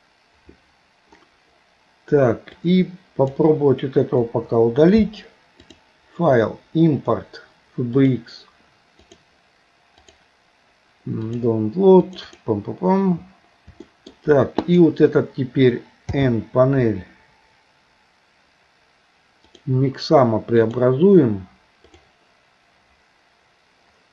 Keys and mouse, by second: 4.2 Delete, 5.7-8.3 drag, 13.9 shift+middle click, 14.7 click, 16.1 n, 19.5 click, 20.6-22.9 drag.